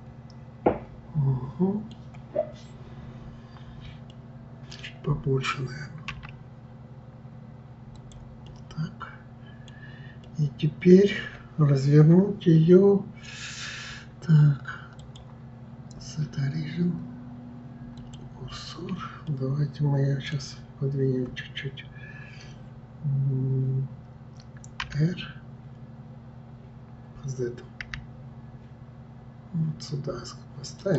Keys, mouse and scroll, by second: 4.1-6.1 middle drag, 6.1 s, 8.5-9.7 middle drag, 10.2-13.2 middle drag, 15.0-18.0 drag, 19.3-22.2 middle drag.